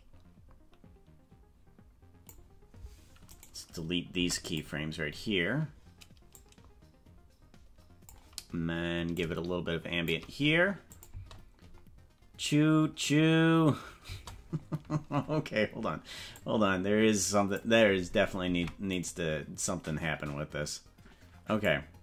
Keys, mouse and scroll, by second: 3.3 right click, 4.1 Delete, 6.3-8.1 drag, 9.3 shift+click, 10.9 click, 11.1 space, 14.1 space, 16.3-17.7 drag, 18.4 ctrl+Tab, 18.9 right click, 21.6-22.0 drag.